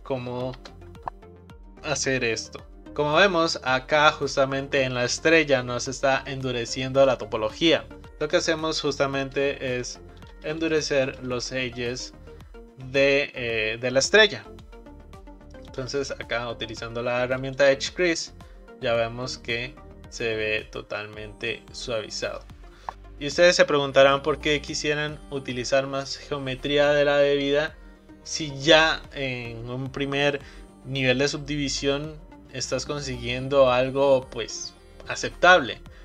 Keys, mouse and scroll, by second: 0.5 shift+r, 8.3 click, 9.8 shift+drag, 10.3 shift+click, 10.6 shift+click, 11.1 shift+click, 14.5-17.6 right drag, 18.1 click, 19.2 scroll down 2, 19.6-22.9 middle drag.